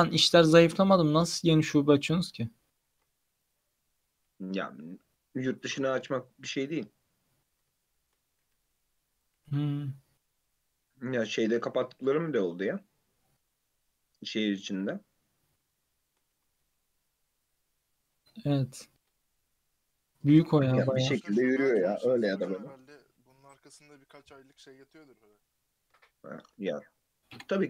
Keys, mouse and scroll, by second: 0.3 ctrl+z, 0.9 click, 2.1 ctrl+z, 3.0 ctrl+z, 3.4 click, 4.3 1, 4.7 3, 4.9 click, 7.9-8.5 shift+middle drag, 8.5 e, 9.4 g, 15.8 shift+middle click, 16.5 e, 18.6 g, 25.3 click, 26.1 shift+middle click, 26.6-27.2 scroll down 2, 27.2 shift+middle click.